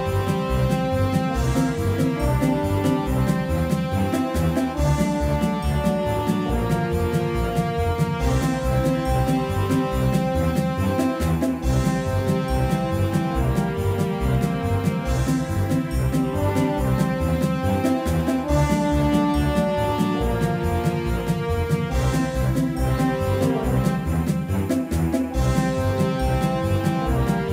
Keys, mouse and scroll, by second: 10.8 middle click, 13.0 Tab, 15.5-17.8 drag, 16.9 x, 18.0 z, 19.1 z, 20.7 z, 22.1 Tab, 23.2 Tab, 24.4 z, 27.1 Tab.